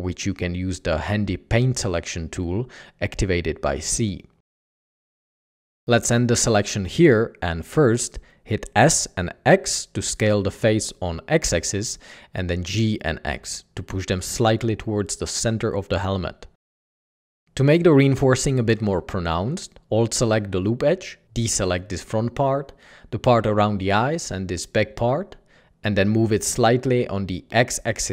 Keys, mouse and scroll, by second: 0.0-0.5 typing, 1.7 typing, 9.0-9.5 typing, 11.2 Escape, 11.8 typing, 14.7 Tab, 15.3 g, 16.8 Tab, 17.3 g, 18.5 ctrl+e, 20.1 c, 22.3 typing, 23.8 typing, 24.9 typing, 26.0 typing, 27.4 Tab, 27.8 typing.